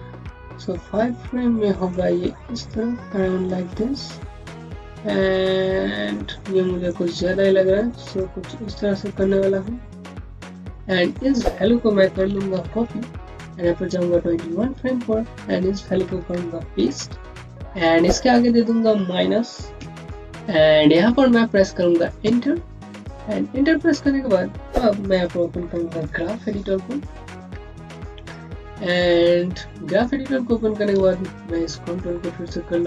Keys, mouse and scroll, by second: 0.1 click, 2.0 Home, 6.7 click, 12.0 ctrl+c, 12.2 ctrl+c, 12.4 typing, 14.3 click, 16.7 ctrl+v, 18.4 click, 19.6 KP_Subtract, 22.1 KP_Subtract, 22.5 KP_Enter, 25.0 click, 27.2 alt+shift+6, 28.2 scroll up 1, 28.7 alt+middle click, 29.3-30.9 scroll up 1, 30.9 space, 31.0 click, 31.3 space, 32.0-32.7 scroll up 1, 32.7 click.